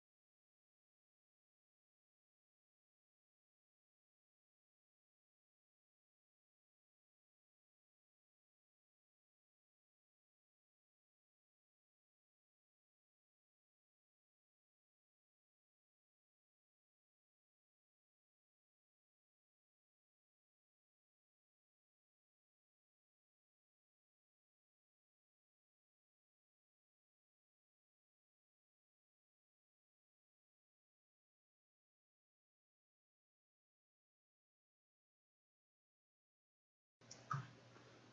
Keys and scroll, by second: 8.8 ctrl+z, 10.2 ctrl+z, 22.8 ctrl+z, 24.4 ctrl+z, 29.3 ctrl+z.